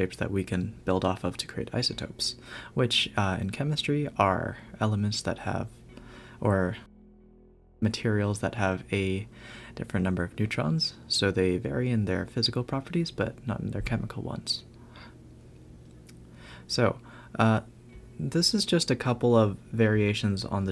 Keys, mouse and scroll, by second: 2.7-3.0 scroll up 3, 3.4 Tab, 6.1 Tab, 6.5-7.3 scroll down 4, 7.6 shift+a, 9.8-11.6 drag, 11.6 g, 12.8 Tab, 13.6 click, 14.0 shift+click, 14.5 shift+click, 15.1 shift+click, 15.5 shift+click, 15.9 s, 16.9 Tab, 17.7 Tab, 18.1 s, 18.4 Tab, 19.8 a, 19.9 a, 20.2 click.